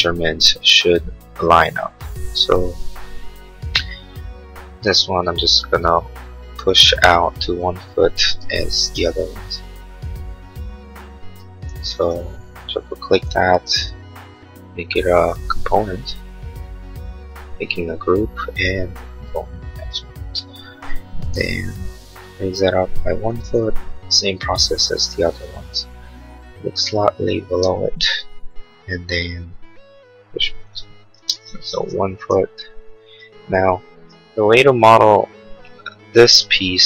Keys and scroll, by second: 8.5 1, 8.7 ', 9.0 Return, 11.2 space, 21.3 m, 23.6 Return, 27.5 space, 28.4 p, 31.1 space, 31.4 Escape.